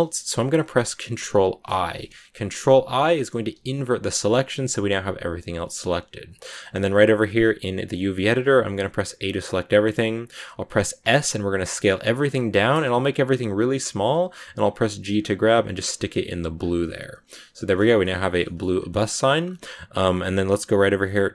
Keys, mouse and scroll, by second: 1.5 ctrl+i, 2.4 middle click, 3.1 scroll up 1, 3.1-3.4 scroll down 1, 3.4 g, 5.5-8.3 shift+middle drag, 8.3 a, 16.1 Tab, 16.5 scroll down 2, 16.7-18.5 middle drag, 18.5-21.3 scroll up 5, 18.8 middle click, 19.0 shift+middle click.